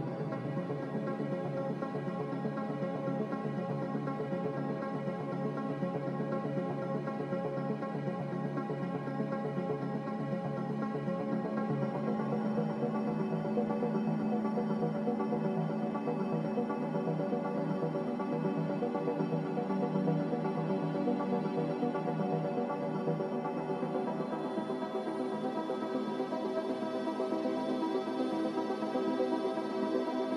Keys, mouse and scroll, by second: 4.9 a, 8.3 ctrl+c, 8.9 ctrl+r, 20.2-20.6 scroll down 2, 21.4 n.